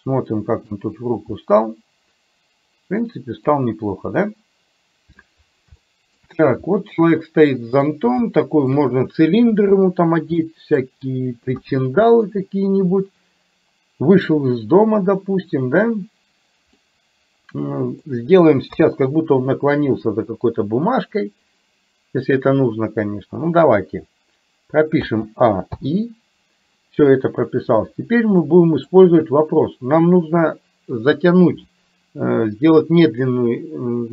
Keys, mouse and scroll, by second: 0.8-1.4 scroll down 1, 3.9-5.2 middle drag, 3.9 scroll up 1, 5.9 shift+middle click, 6.9-8.0 middle drag, 8.3 shift+middle click, 10.4 middle click, 11.7 KP_1, 16.9-18.8 middle drag, 18.8 KP_3, 25.0 a, 25.8 i, 28.7 middle click.